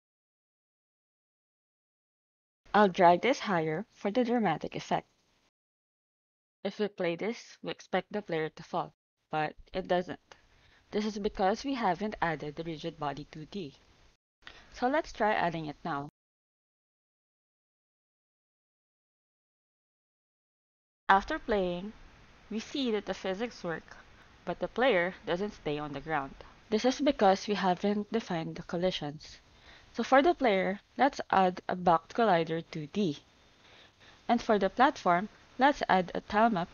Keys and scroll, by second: 15.2-16.3 typing, 16.5 Down, 17.0 Return, 28.8-29.7 typing, 30.3 Down, 30.8 Return, 33.5 alt+Tab.